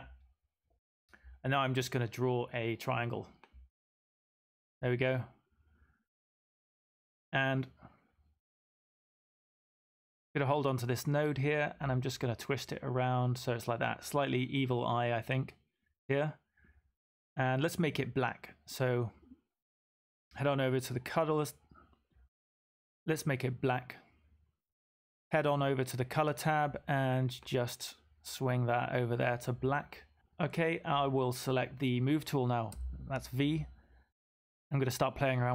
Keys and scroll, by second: 32.6 v.